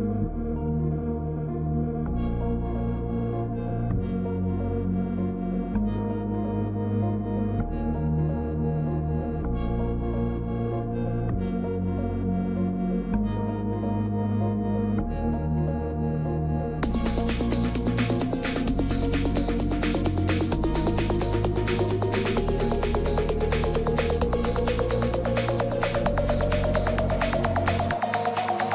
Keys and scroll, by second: 7.8 ctrl+t.